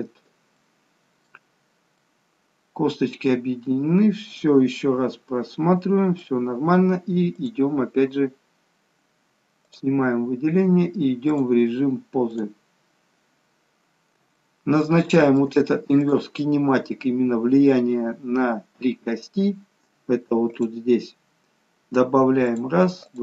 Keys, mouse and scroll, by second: 0.1-0.5 scroll down 1, 0.5 middle click, 1.6 scroll down 2, 1.9 middle click, 7.4 click, 9.7 click, 13.1-13.8 scroll down 1, 13.8 scroll up 2, 14.5 shift+middle click, 16.0 click, 20.5 click, 22.4 click.